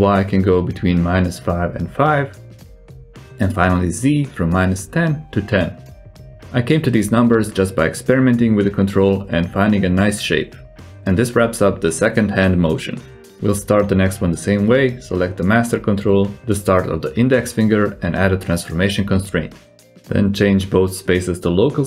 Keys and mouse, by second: 0.6-2.9 drag, 3.6-6.3 drag, 7.2 alt+z, 7.7 click, 8.0-8.4 drag, 8.7 r, 12.2 g, 14.2 r, 14.3 right click, 15.4-15.7 right drag, 16.4 shift+click, 17.2 ctrl+shift+c, 20.1-21.0 drag, 21.5-21.8 drag.